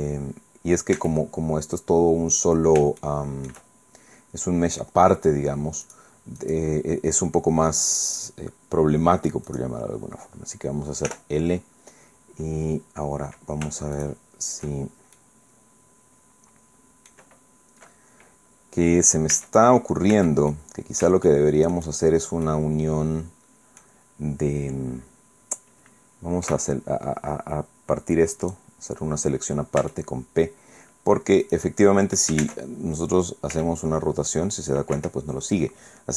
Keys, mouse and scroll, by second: 1.0 Tab, 2.2 middle click, 3.0 shift+middle click, 3.8 shift+middle click, 5.8 click, 6.4 click, 8.1 click, 9.5 click, 11.1 l, 12.1 middle click, 12.1-12.4 scroll down 2, 14.0 shift+right click, 15.2-17.3 right drag, 17.4 middle click, 17.4-18.0 scroll up 2, 19.3 Tab, 20.1 Tab, 20.5 middle click, 21.8-22.4 shift+scroll up 2, 22.4-24.0 middle drag, 26.4 p, 28.4 click, 29.2-30.4 scroll down 2, 29.8 Tab, 31.4 click, 32.4 ctrl+Tab, 33.5 r, 35.0 Escape.